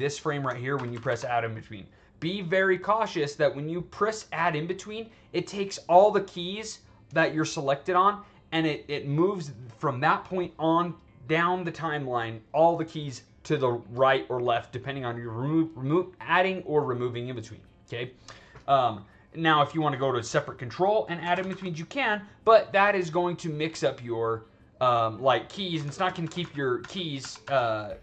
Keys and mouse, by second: 0.7 alt+a, 0.8 alt+a, 1.0 alt+a, 19.7 click, 21.2 alt+a, 21.4 alt+a, 22.0-24.1 drag, 25.8 ctrl+z, 26.0 ctrl+z, 26.2 ctrl+z, 26.3 ctrl+z, 26.7 ctrl+z, 27.1 ctrl+z, 27.4 ctrl+z.